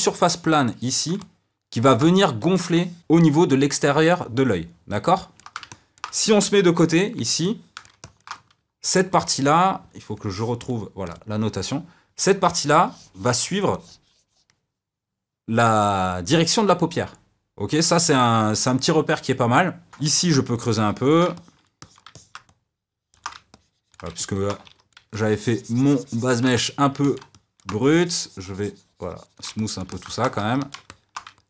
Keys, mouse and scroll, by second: 1.2-2.2 middle drag, 2.2 f, 2.7 click, 3.0-6.7 middle drag, 6.7 KP_3, 7.4-11.1 shift+middle drag, 11.1-19.9 drag, 19.9 middle click, 20.0 f, 20.5 ctrl+click, 21.3-23.5 middle drag, 23.5 ctrl+click, 24.1 middle click, 24.6 f, 25.1-26.5 shift+drag, 26.5-27.8 middle drag, 27.8-29.5 shift+drag, 29.5 middle click, 30.4 f, 30.8 middle click, 31.3 ctrl+click.